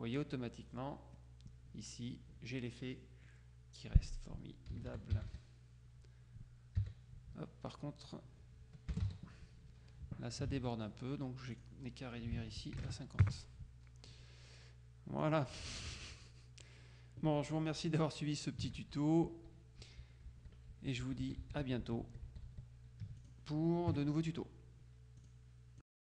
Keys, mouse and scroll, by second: 0.0-0.1 typing, 4.6-6.9 typing, 9.0 BackSpace, 9.1 e, 11.5 click, 12.3 ctrl+a, 12.9 ctrl+KP_5, 13.3 ctrl+KP_Enter, 15.3-16.2 drag, 18.9 ctrl+z, 19.9 z, 20.3 z, 23.3 click, 23.9 KP_Subtract, 25.3 click.